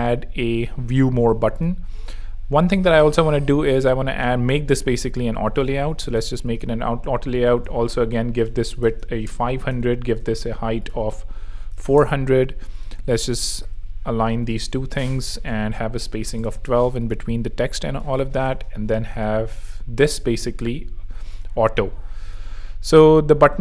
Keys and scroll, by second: 4.0 shift+a, 7.9 shift+super+Right, 8.5 shift+super+5, 8.7 0, 9.2 KP_Enter, 9.7 shift+super+KP_Enter, 9.9 shift+super+Down, 11.2 4, 11.6 0, 11.8 Return, 12.9 shift+Return, 13.5 shift+a, 14.6 shift+2, 14.7 Return, 15.9 1, 16.2 2, 16.3 Return, 20.6 x.